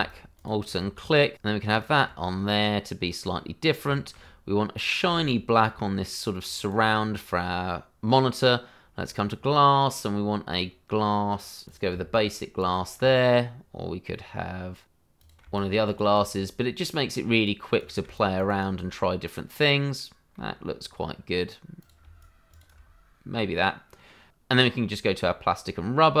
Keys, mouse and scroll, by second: 0.0 alt+right click, 0.4 click, 2.5-3.0 scroll up 1, 3.0 middle click, 3.6 scroll down 1, 3.9 shift+middle click, 5.8 right click, 6.5 right click, 7.0-7.4 scroll up 1, 7.4 middle click, 9.0 click, 10.1-11.5 scroll down 1, 12.2 click, 12.5 alt+right click, 12.7 right click, 13.8 scroll down 1, 15.1 click, 15.6 right click, 16.9-17.3 scroll down 1, 17.3 click, 17.8 double click, 18.3 alt+right click, 20.3 middle click, 21.8 click, 22.2 alt+right click, 22.5 click, 23.2-23.5 scroll down 1, 23.5 middle click, 25.2 click.